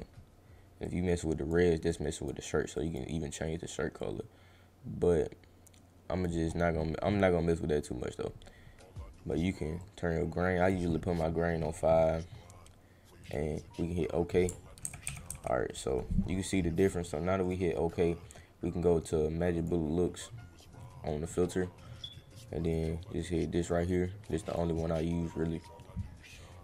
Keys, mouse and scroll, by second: 0.8 click, 1.9-2.2 drag, 2.8 click, 4.0-6.2 drag, 6.4 middle click, 6.7-7.2 scroll, 8.3-8.7 scroll, 9.8 click, 13.2 click, 17.4 click, 19.5 click, 22.6 click, 24.5 click.